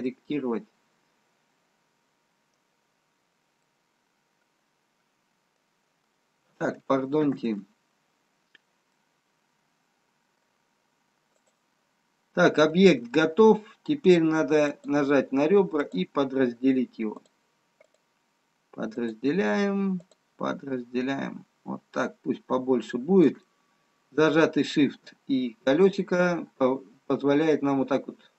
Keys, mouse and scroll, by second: 0.3 middle click, 7.8 ctrl+z, 9.0 middle click, 11.6 click, 15.2 click, 21.1-21.8 scroll up 1, 22.9-24.2 scroll up 1, 24.2 shift+middle click.